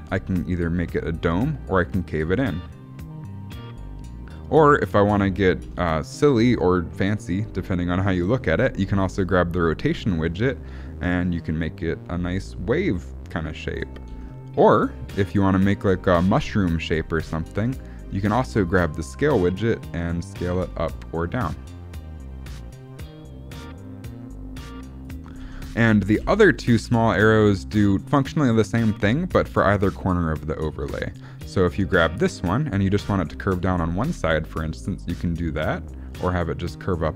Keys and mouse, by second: 5.6 ctrl+z, 9.0 click, 9.8-13.7 drag, 14.0 ctrl+z, 16.1-17.3 drag, 18.3 click, 19.4-25.0 drag, 25.3 ctrl+z, 26.2 ctrl+z, 32.3-36.9 drag.